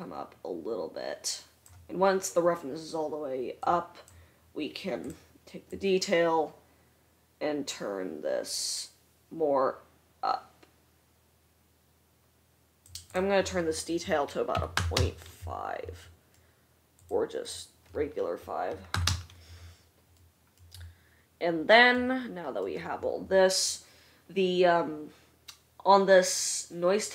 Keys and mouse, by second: 5.2 click, 17.5-27.1 drag.